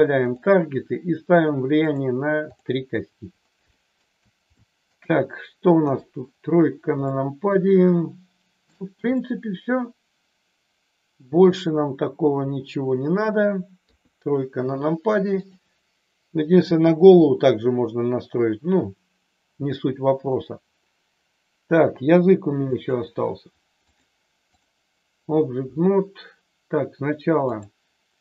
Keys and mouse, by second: 1.3 click, 1.8 click, 3.6 shift+middle click, 4.5 shift+middle click, 5.7 KP_3, 7.1-8.7 shift+middle drag, 9.1-13.4 middle drag, 13.8 KP_3, 15.5 click, 20.1 r, 22.7 click, 23.9-24.7 drag, 27.5 click.